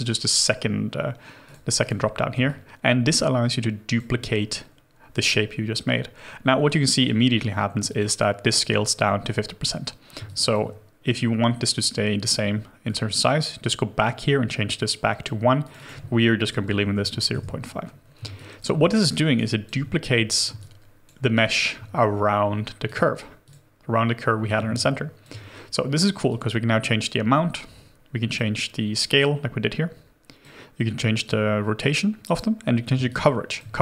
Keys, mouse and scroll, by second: 1.8 double click, 2.5 alt+click, 10.3 alt+click, 15.8 double click, 16.7 0, 16.7 ., 17.0 5, 17.3 Return, 18.4 alt+click, 18.9 alt+middle click, 19.2 alt+right click, 19.5 alt+click, 20.6 alt+click, 21.4 alt+right click, 24.8 alt+click, 33.1 alt+click.